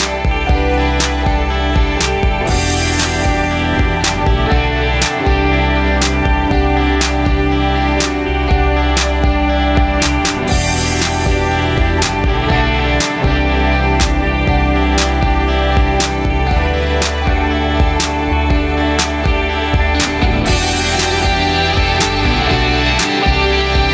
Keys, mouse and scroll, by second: 1.1 click, 2.1 click, 7.0 click, 8.7-9.7 drag, 9.9 click, 16.7 click, 17.3 click, 17.7 click, 17.9 click, 19.0-19.8 middle drag, 21.6 click, 23.2 click.